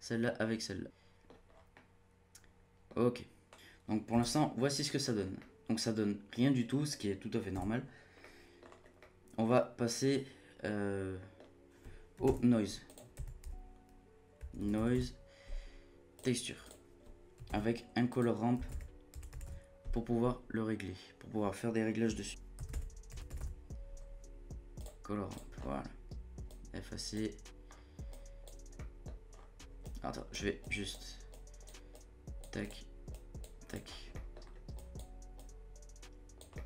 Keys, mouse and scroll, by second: 1.5 scroll down 2, 1.7-3.5 middle drag, 3.5-4.1 scroll up 1, 4.1 z, 5.0-5.4 scroll up 2, 5.4-7.5 middle drag, 7.5 z, 8.2 middle click, 8.6-9.0 scroll up 4, 9.0 middle click, 9.4-9.8 scroll up 1, 9.8-12.2 middle drag, 12.2 shift+a, 17.5 shift+a, 25.5 scroll up 1, 25.7-26.5 scroll down 2, 26.5 click, 27.7-28.1 scroll up 2, 28.1-28.7 drag, 28.7 middle click, 29.3-29.8 scroll down 7, 29.8-32.7 drag, 33.1 click, 33.7 click, 33.9-34.7 scroll up 3, 34.1 middle click, 34.7-36.5 drag, 36.5 middle click.